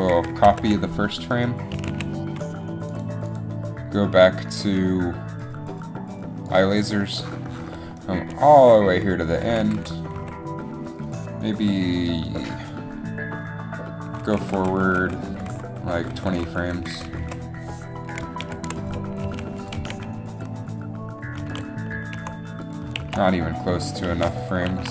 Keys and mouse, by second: 0.6 ctrl+c, 1.8 a, 2.0 a, 6.0 ctrl+c, 6.0 a, 8.8 click, 9.1-9.8 Right, 9.9 Right, 10.3 Left, 14.2 Right, 14.4 Right, 15.5 Right, 15.6 Right, 18.6 ctrl+v, 19.4 a, 21.7 alt+a, 23.1 alt+a, 23.8 alt+a, 24.3 alt+a, 24.8 alt+a.